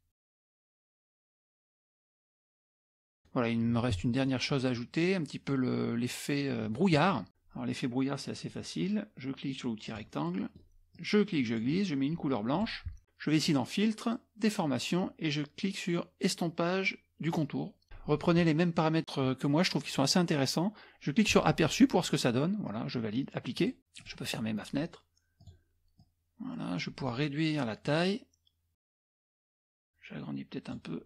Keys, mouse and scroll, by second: 0.2-1.9 drag, 2.3 click, 2.8-3.5 scroll up 1, 3.9-4.6 scroll up 1, 7.3 scroll up 1, 9.9 click, 10.3 middle click, 10.3-10.9 scroll down 1, 11.0-12.2 drag, 12.6 click, 13.4 click, 17.3 click, 21.2 click, 23.6 click, 24.0 click, 24.4 middle click, 25.4 click, 26.0-27.1 drag, 27.9-29.7 drag, 29.8-31.0 drag.